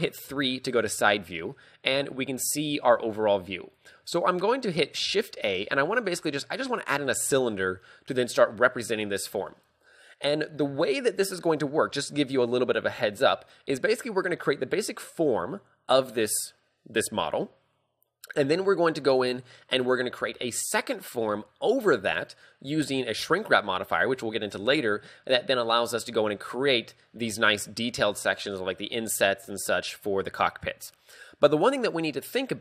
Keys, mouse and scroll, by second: 0.3 KP_3, 1.2 shift+middle click.